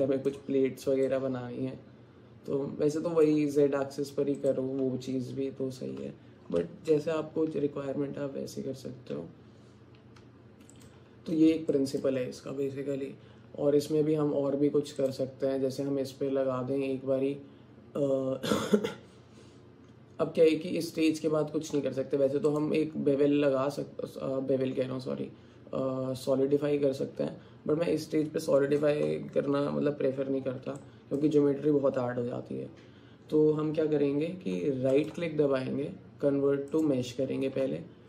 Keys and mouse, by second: 1.1-3.3 alt+drag, 4.4 click, 10.2 Tab, 11.7 click, 15.7-21.1 drag, 22.5-27.2 drag, 30.9 middle click.